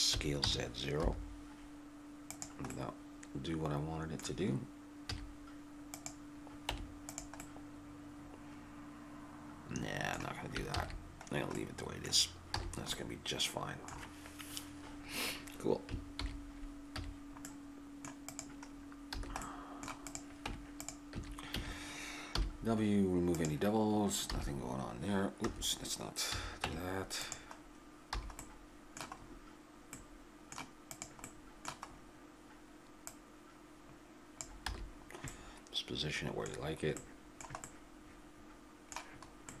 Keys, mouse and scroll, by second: 0.1 s, 2.7 click, 3.0-5.1 middle drag, 5.1 z, 6.7 Tab, 9.1-10.1 middle drag, 10.7 ctrl+z, 11.3 middle click, 12.6 a, 16.1 alt+h, 17.0 a, 18.3-21.1 drag, 19.1 a, 20.4 Tab, 21.1 a, 21.6 a, 22.4 w, 24.4 s, 26.3 a, 26.7 Tab, 27.6 click, 28.2 a, 30.9-33.9 right drag, 33.9 click, 34.7-39.6 middle drag, 34.7 a.